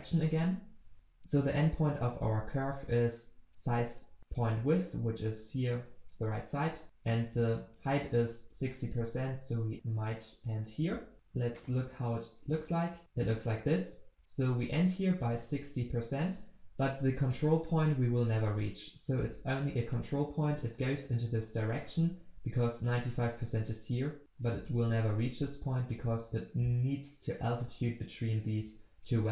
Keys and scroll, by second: 12.5 ctrl+s.